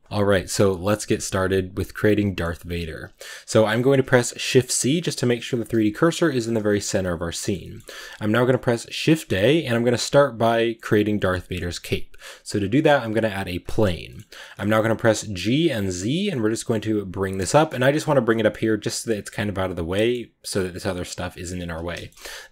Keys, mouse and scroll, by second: 0.0-2.3 shift+middle drag, 2.3 scroll down 1, 2.5 middle click, 2.9 z, 3.1-3.6 scroll down 3, 3.6-4.5 middle drag, 4.5 shift+c, 4.8 middle click, 5.3 click, 5.7 shift+c, 6.1 middle click, 6.5-8.8 scroll up 5, 7.3-7.6 shift+middle drag, 14.2 shift+middle drag, 14.4 scroll up 1, 15.1 g, 17.3 shift+middle click, 17.7 scroll down 2, 18.1-18.5 middle drag, 18.5 g, 19.7-21.4 middle drag, 21.4 g, 21.8 shift+middle click, 21.9-22.5 shift+scroll up 1.